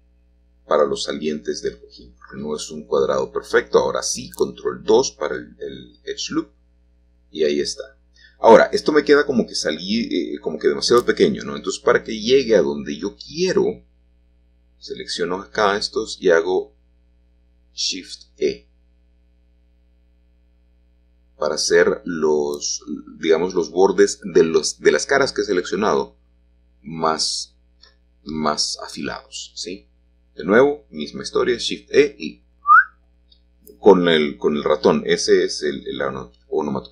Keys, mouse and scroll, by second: 0.5-2.7 drag, 5.8-16.3 drag, 20.2-21.2 drag, 22.6 shift+click, 22.9-24.7 shift+drag, 24.8 shift+click, 25.4 shift+click, 26.0-28.6 middle drag, 30.9-34.5 drag, 34.5-35.4 scroll up 1, 35.4-36.9 middle drag.